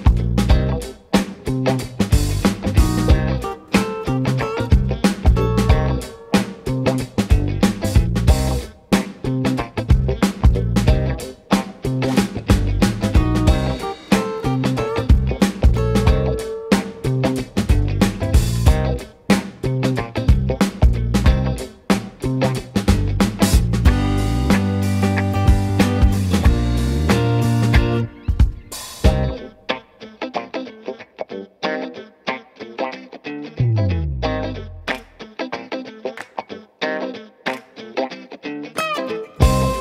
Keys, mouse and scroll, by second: 0.7 Tab, 1.3 shift+a, 3.3 r, 5.0-5.7 middle drag, 5.7 s, 13.1-14.8 middle drag, 14.8 Tab, 15.9 Tab, 17.0 shift+d, 19.3 click, 20.5 h, 21.0 click, 21.4-24.0 middle drag, 24.0 g, 26.6-31.0 middle drag, 31.0 KP_1, 31.5 Tab, 37.7 Tab.